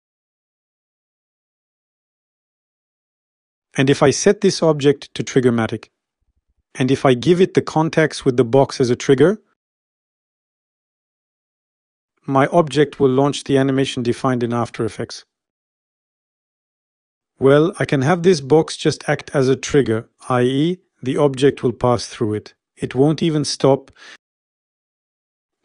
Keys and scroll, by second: 0.2 0, 0.3 Return.